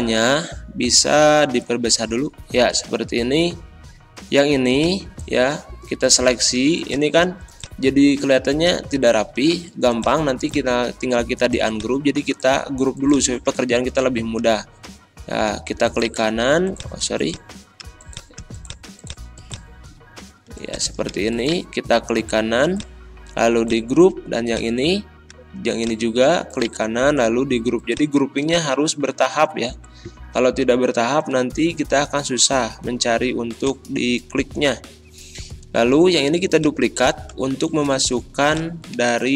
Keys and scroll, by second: 38.9 ctrl+a.